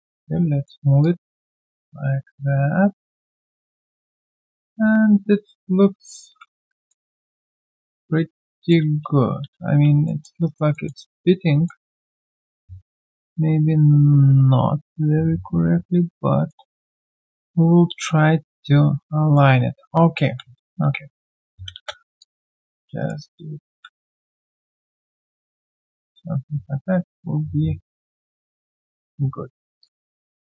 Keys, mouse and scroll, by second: 1.0 alt+click, 3.3 alt+middle click, 3.5 alt+click, 6.4 r, 6.9 alt+middle click, 8.9 space, 9.4 space, 10.0 alt+middle click, 10.4 alt+right click, 10.7 alt+middle click, 11.0 alt+right click, 11.4 alt+middle click, 16.5 alt+middle click, 19.8 right click, 20.4 scroll down 1, 20.4 q, 22.2 alt+click, 23.0 alt+right click, 23.2 alt+click, 23.5 alt+middle click, 23.8-24.7 typing, 25.6 alt+click, 29.8 shift+click.